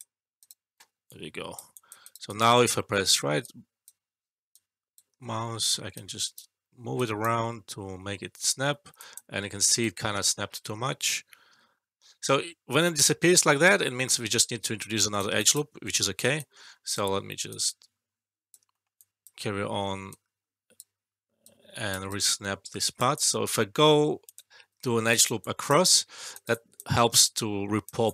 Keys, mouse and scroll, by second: 0.3 right click, 1.0-1.6 alt+click, 2.0 alt+right click, 2.6 alt+middle click, 3.3-4.0 right click, 4.8-5.1 right click, 5.1 alt+middle click, 5.9-6.5 right click, 8.5 ctrl+z, 8.9 alt+click, 9.7-15.7 right drag, 15.4 alt+click, 16.3-17.0 right drag, 18.7 alt+middle click, 19.0 alt+click, 20.1-21.0 right drag, 23.1 alt+click, 24.8 alt+middle click, 25.0 alt+right click, 25.3 alt+click, 25.9 alt+middle click, 26.2 alt+right click, 26.4 alt+click, 27.4-28.1 alt+click.